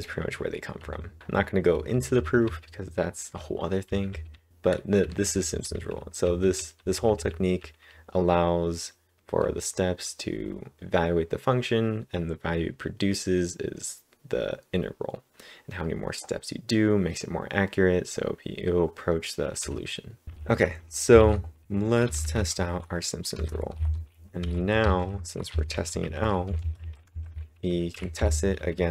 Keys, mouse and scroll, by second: 0.5-9.4 typing, 19.6-21.2 typing, 23.3 Return, 23.7 shift+9, 24.8-28.9 typing.